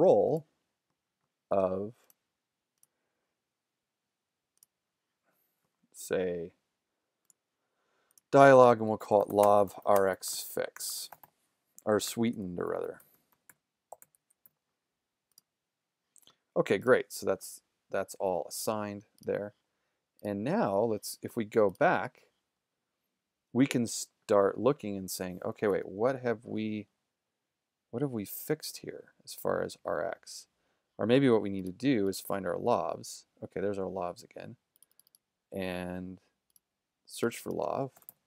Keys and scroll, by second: 8.8-14.5 typing, 25.7 super+=, 37.7-38.2 typing.